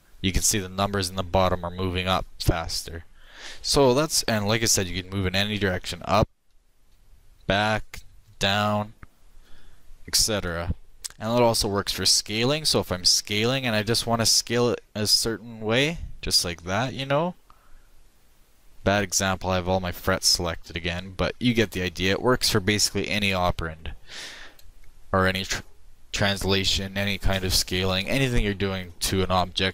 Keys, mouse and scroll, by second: 11.0 middle click, 12.2 middle click, 13.1 s, 23.9-26.3 middle drag.